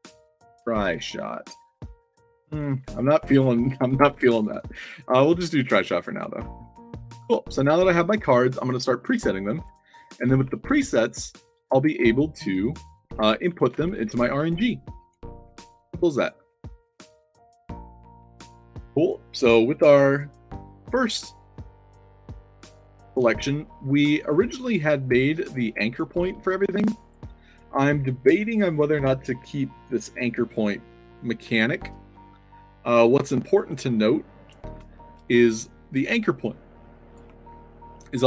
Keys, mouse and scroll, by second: 0.6 shift+s, 0.9 o, 4.0 shift+s, 4.3 o, 5.9-7.0 typing, 7.4-8.0 alt+drag, 8.2-10.0 typing, 10.4 alt+click, 11.5 click, 12.9-17.2 typing, 17.6 alt+drag, 21.2-21.9 alt+right drag, 21.9 alt+click, 22.6-23.8 typing, 24.2-24.5 drag, 24.7-25.1 alt+drag, 25.5 click, 26.7 ctrl+z, 32.1 middle click, 33.2-33.8 middle drag, 35.2-35.9 alt+drag, 36.2-37.1 alt+drag.